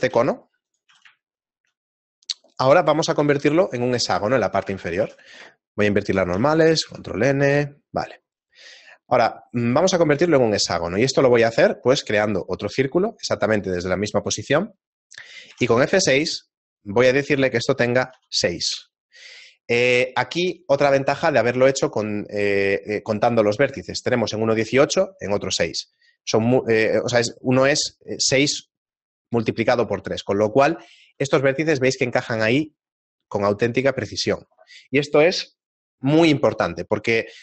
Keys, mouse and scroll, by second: 0.4 s, 0.9 a, 1.9 shift+middle click, 1.9-2.5 scroll down 1, 2.5 scroll down 2, 2.7 KP_7, 3.9 Tab, 4.1 middle click, 5.1 a, 6.3 ctrl+n, 7.4 Tab, 7.9 middle click, 8.4 right click, 8.9-9.5 scroll up 2, 9.5 middle click, 10.2 z, 10.4 middle click, 13.3 shift+a, 15.5 F6, 30.9 right click, 32.3 right click, 32.7 scroll up 1, 34.6-34.9 scroll down 7, 35.6 scroll down 4.